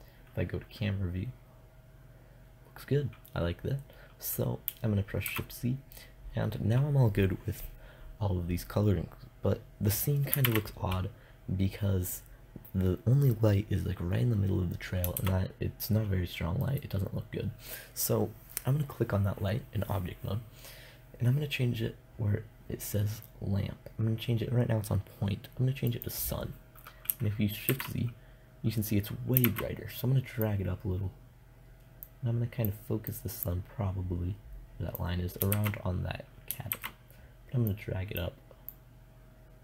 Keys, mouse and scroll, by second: 0.8 click, 4.7 shift+z, 9.9 shift+z, 14.7 shift+z, 27.1 shift+z, 28.9 shift+z, 29.9-31.7 drag, 32.1-34.7 drag, 35.0 shift+z, 36.2 shift+z, 37.1-39.6 drag.